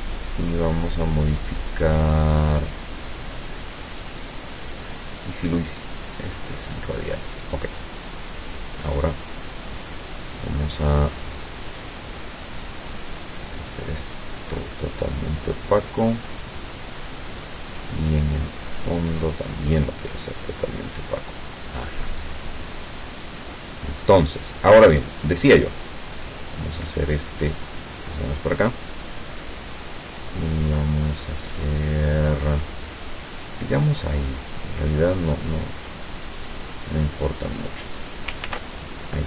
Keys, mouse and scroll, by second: 4.9 click, 6.2 click, 8.3 click, 12.9-14.1 drag, 17.3 click, 19.3-28.3 drag, 29.5-33.4 drag, 34.2-38.3 drag, 38.5 ctrl+z.